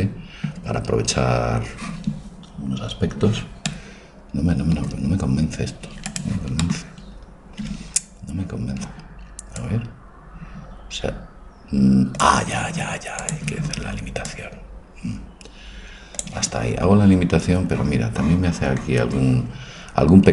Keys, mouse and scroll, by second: 6.1-9.7 right drag, 7.6 Tab, 9.7-11.5 drag, 13.4-16.3 drag, 16.9-20.3 middle drag.